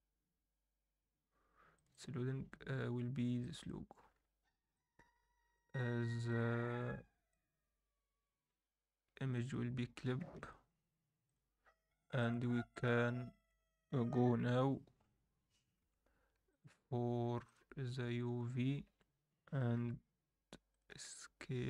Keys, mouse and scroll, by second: 4.1-4.7 scroll up 1, 4.7-9.2 drag, 9.4-12.9 drag, 14.4 u, 16.5-17.6 drag, 18.1-18.6 scroll down 2, 18.6 scroll up 1, 18.8 a, 19.9 g.